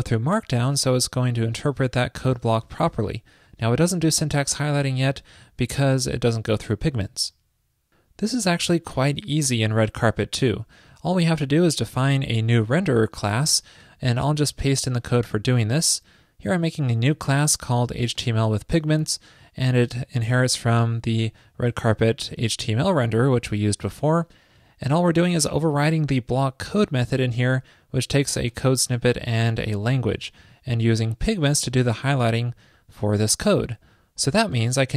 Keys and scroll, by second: 14.6 super+v.